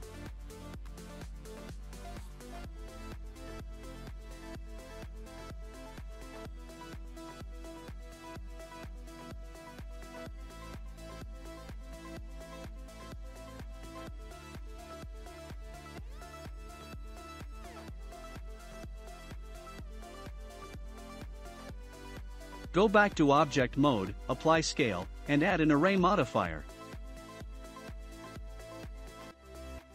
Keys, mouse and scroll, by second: 0.3-1.0 scroll up 2, 1.0 click, 1.8 3, 2.7 shift+middle click, 3.8 click, 5.4 KP_Decimal, 6.1 scroll down 7, 6.7-13.2 shift+middle drag, 13.2 scroll down 1, 13.7 click, 14.0-14.4 scroll down 1, 14.4 shift+middle click, 15.3 Tab, 15.5 click, 15.8-16.2 scroll down 2, 16.2-17.0 middle drag, 17.0-17.4 scroll down 2, 18.2-20.2 shift+middle drag, 20.2 scroll up 4, 21.7 click, 22.3-23.8 middle drag, 23.8 ctrl+a, 26.1 click.